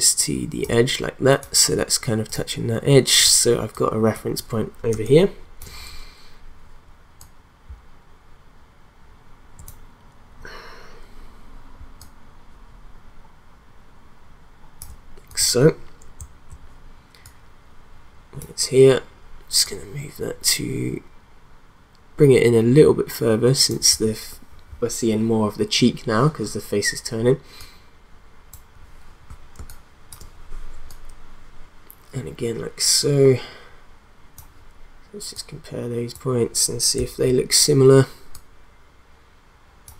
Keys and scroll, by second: 4.9 space, 29.6 space.